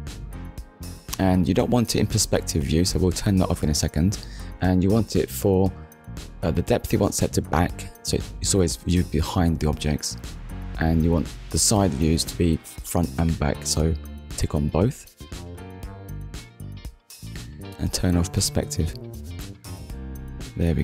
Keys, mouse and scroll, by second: 3.4 click, 6.5 click, 7.2 click, 8.7 shift+middle click, 11.4 click, 13.3 middle click, 14.7-15.1 scroll down 2, 15.1 shift+middle click, 15.6 middle click, 18.4 click, 20.0 KP_1.